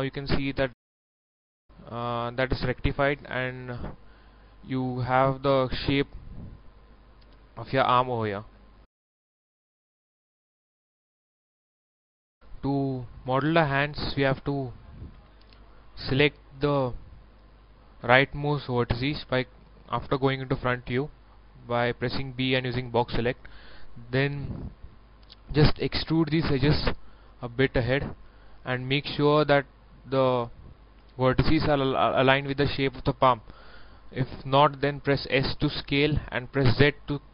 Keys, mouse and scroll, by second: 1.3 scroll down 1, 1.5 middle click, 1.5-4.6 middle drag, 5.4 scroll up 1, 5.9 middle click, 6.1 scroll down 1, 6.7 middle click, 6.8-8.6 middle drag, 12.3 click, 12.6 middle click, 13.1 scroll up 1, 13.7 right click, 14.1 Tab, 14.5 middle click, 15.1 a, 15.7-16.0 scroll up 1, 19.3 KP_1, 20.4 b, 21.1-22.1 drag, 22.3 shift+middle click, 22.9 scroll up 1, 23.3 scroll down 1, 24.8 e, 25.7-31.2 drag, 35.2 s.